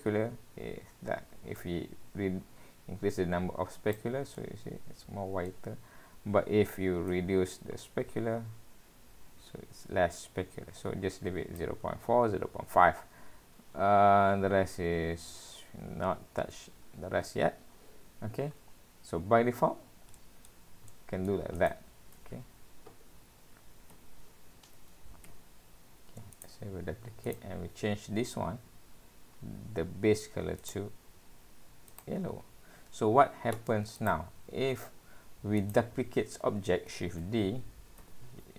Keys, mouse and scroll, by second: 1.6 click, 4.4 middle click, 7.1 click, 12.9-13.7 scroll down 4, 14.1-16.2 scroll down 6, 16.2-16.7 scroll up 3, 16.7-17.3 scroll down 3, 17.6 scroll up 1, 17.8 scroll down 1, 17.9-18.6 scroll down 3, 18.6-19.0 scroll up 2, 19.6 scroll down 1, 19.8-20.5 scroll down 3, 20.2 middle click, 20.9 middle click, 21.6 click, 23.1 shift+d, 27.3 click, 28.3-30.3 scroll up 13, 30.6 click, 34.0 click, 35.6 click, 37.0 shift+d.